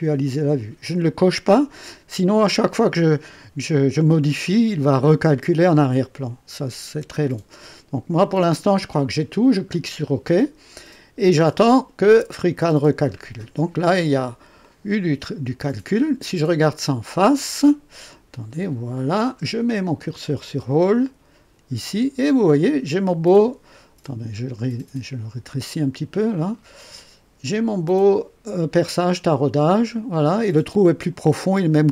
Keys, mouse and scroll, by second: 9.5 click, 13.1-13.4 scroll up 2, 13.7 right click, 14.6-16.1 drag, 17.4 click, 18.0-19.3 right drag, 24.0 scroll down 1, 24.5 right click, 26.2 click.